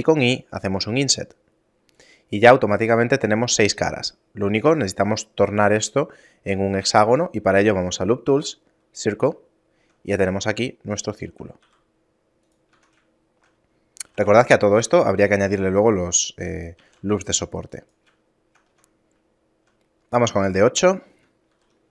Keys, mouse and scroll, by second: 6.5 w, 9.1 shift+middle click, 10.5 shift+middle click, 11.3 e, 12.4 Tab, 12.8 shift+middle click, 13.2-13.7 scroll down 4, 13.7 a, 13.9 a, 14.4 g, 16.5 shift+a, 18.0 shift+middle click, 18.4 Tab, 18.6 scroll up 1, 19.1 middle click, 19.3 shift+middle click, 21.5 ctrl+r.